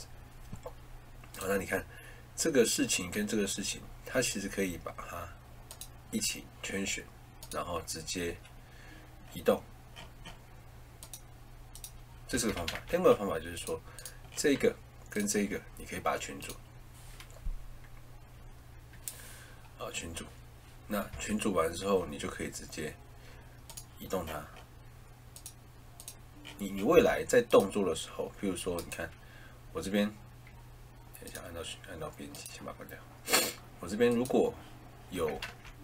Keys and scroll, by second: 12.2 Escape, 12.6 ctrl+z, 21.0 Escape, 26.9 Escape, 35.4 ctrl+z.